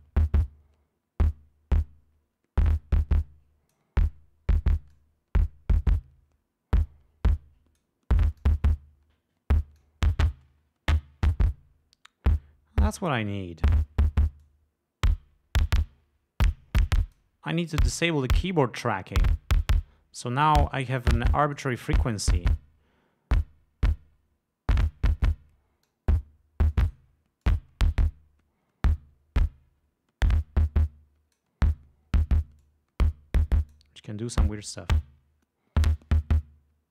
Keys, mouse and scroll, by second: 5.3-8.3 drag, 8.7 click, 10.1-14.2 drag, 14.8-17.7 drag, 20.5-22.1 drag, 26.2-26.7 drag, 27.1-27.5 drag, 27.8-31.9 drag, 33.0-34.3 drag, 35.0-36.9 drag.